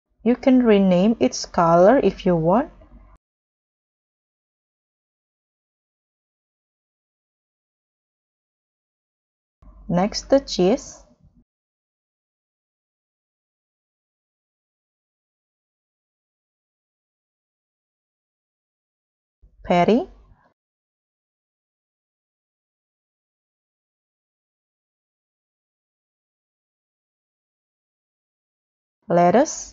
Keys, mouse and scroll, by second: 6.1 double click, 6.7 b, 6.9 u, 7.1 n, 7.4 Return, 12.7 double click, 13.4-13.9 typing, 20.6 double click, 20.9 double click, 21.0 double click, 21.7 b, 21.7 e, 21.9 e, 22.0 f, 22.2 Return.